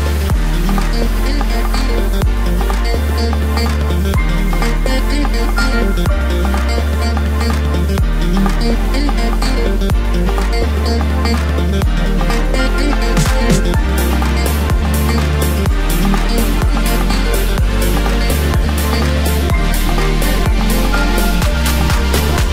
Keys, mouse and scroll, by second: 2.9 ctrl+r, 5.2 click, 5.4 click, 6.1 1, 7.5-10.3 drag, 10.3 s, 13.7 3, 14.2 scroll up 1, 14.9 click, 18.1 shift+click, 19.5 shift+click, 20.9 shift+click, 22.3 shift+click.